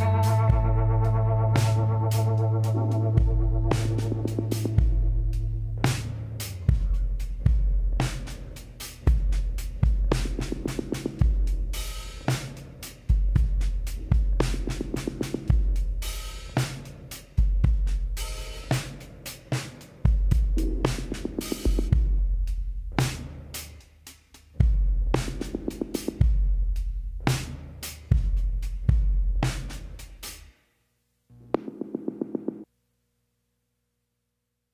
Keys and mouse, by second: 0.6 g, 3.4 z, 7.1 KP_7, 11.6 z, 13.1 s, 16.9 KP_7, 18.8 s, 22.0 click, 22.9 KP_1, 23.3 z, 23.9-26.1 middle drag, 26.1 z, 28.3 a, 30.3 KP_1, 32.0 a.